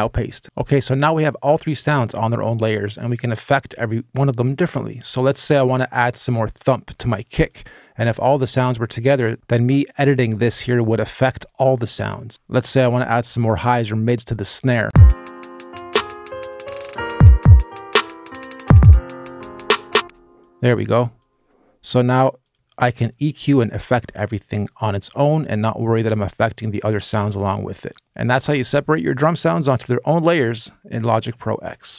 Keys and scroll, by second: 14.6 space, 19.7 space, 27.9 space.